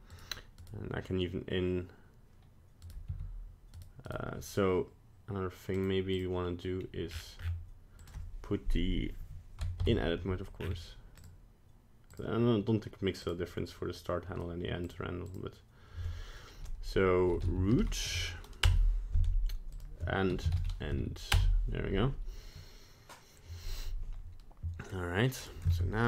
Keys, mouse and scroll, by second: 0.6 right click, 2.8 right click, 3.0 r, 4.0 right click, 5.7 click, 6.1 click, 6.7-7.9 scroll down 13, 7.9 click, 9.8 Tab, 10.5-11.1 scroll down 6, 11.1 click, 19.7 click, 25.4 right click, 25.7 ctrl+Tab.